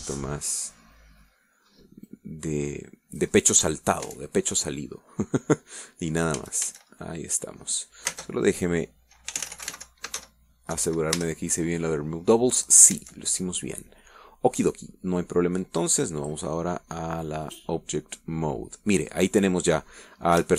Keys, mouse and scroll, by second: 0.3-2.2 drag, 2.2 scroll down 1, 2.5-3.1 middle drag, 3.3-5.3 drag, 5.3 Tab, 5.7-6.7 middle drag, 6.9 middle click, 7.3 middle click, 7.6 a, 8.1 click, 9.3 space, 10.6-11.4 typing, 12.0 Down, 12.4 Return, 14.2 Tab, 16.1 scroll down 1, 17.5 click, 18.7 click, 19.1 scroll down 1, 19.4-20.5 middle drag.